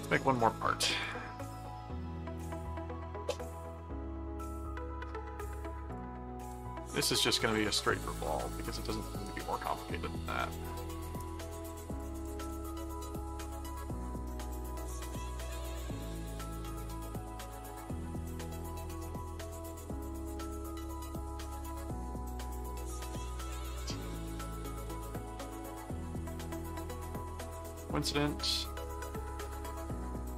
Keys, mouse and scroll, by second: 0.2 click, 1.0 click, 2.4 click, 5.9 click, 7.6 click, 8.9 right click, 11.9 click, 12.8 right click, 14.0 click, 15.4 click, 16.3 click, 18.7 click, 20.7 click, 23.2 click, 25.3 click, 26.2 ctrl+click, 27.5 click, 28.7 right click, 29.3 click, 30.0 click.